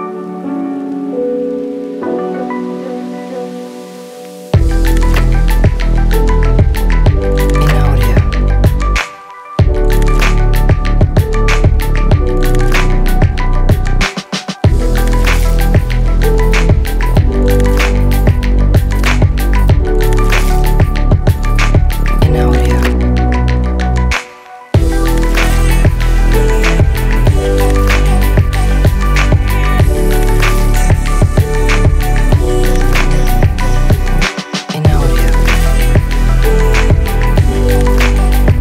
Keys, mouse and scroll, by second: 4.0-4.8 drag, 7.7 click, 9.4-9.7 drag, 18.0 click, 19.6-20.9 drag, 23.7-24.2 middle drag, 25.7 g, 25.9 y, 26.6 click, 27.7 click, 28.6 click, 30.5-32.9 drag, 33.5-34.5 drag, 37.0 s, 37.9 g.